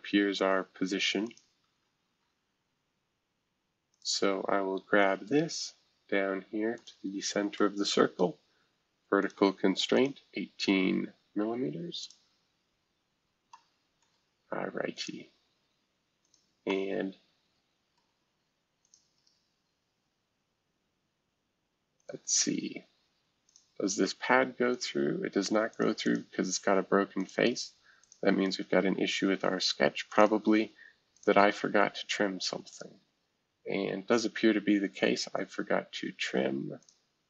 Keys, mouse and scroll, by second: 0.4 click, 1.2 click, 1.6 ctrl+z, 3.9 click, 4.3-5.2 scroll down 1, 5.2-6.7 scroll up 1, 6.7 shift+click, 7.9 shift+v, 9.2 click, 9.9 click, 10.3 scroll down 1, 12.0 click, 13.5-14.9 middle drag, 14.9 click, 15.4 space, 16.2-18.0 drag, 18.0 middle click, 18.8 click, 22.0-24.8 drag, 25.7 click, 26.0 click, 27.2 click, 30.1 click, 31.1 click, 32.7 click, 36.8 click.